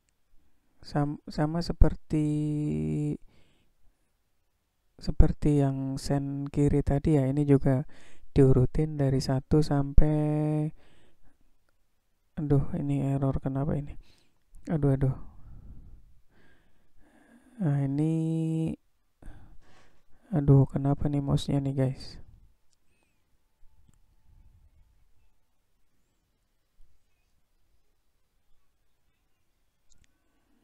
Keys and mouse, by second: 0.9 click, 2.1-5.0 drag, 6.2 click, 7.6-9.5 drag, 10.2 click, 11.9-14.5 drag, 15.6-18.8 drag, 19.9-22.3 drag, 23.5-28.9 drag.